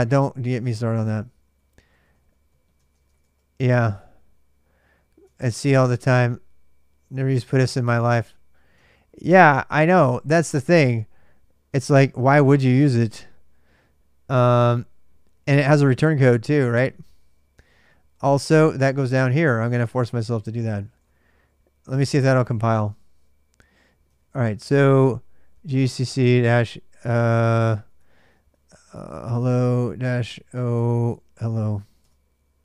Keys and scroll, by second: 0.2-3.7 typing, 5.1 ctrl+[, 5.2-6.3 typing, 8.8 ctrl+a, 9.0 ctrl+a, 10.3 super+Tab, 16.5 super+Tab, 17.2-18.7 typing, 20.4-27.7 typing, 27.7 Return, 28.4 ctrl+[, 28.9-32.6 typing, 29.6 Return.